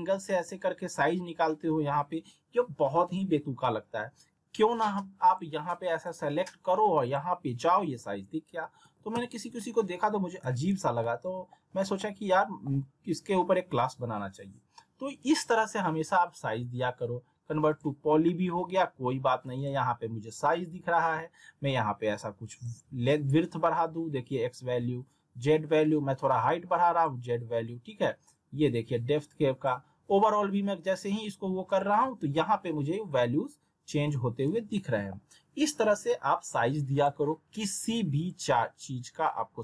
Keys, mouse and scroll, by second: 5.2 click, 8.6 alt+w, 9.1 z, 9.6 alt+middle click, 10.4 z, 11.0 alt+middle click, 11.7 scroll down 1, 12.0-12.9 alt+middle drag, 17.7 click, 20.7 r, 21.6-22.9 drag, 32.2 ctrl+z, 33.9 w, 34.1 w, 34.7-35.3 alt+middle drag, 36.9 click.